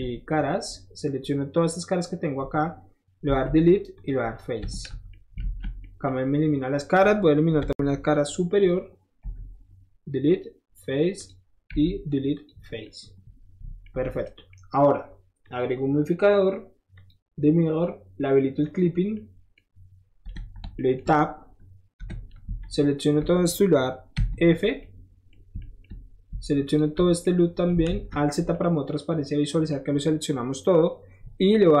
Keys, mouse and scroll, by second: 0.5-2.0 drag, 4.0 click, 4.6 Tab, 5.4 alt+z, 5.8 middle drag, 7.6 Tab, 8.6 click, 9.2 Delete, 10.3 click, 11.2 click, 11.8 Delete, 12.4 click, 12.8-13.9 middle drag, 13.9 Tab, 14.3 middle drag, 15.4 click, 17.0 click, 18.7 click, 19.2-19.6 middle drag, 20.3 Tab, 20.8 middle click, 22.0 2, 22.6 click, 24.1 f, 24.6 middle click, 25.5 shift+middle click, 25.6 shift+click, 25.8-27.1 shift+middle drag, 26.7 alt+shift+click, 27.2 alt+shift+middle click, 27.7 alt+shift+middle click, 27.9 alt+z, 28.5 middle click.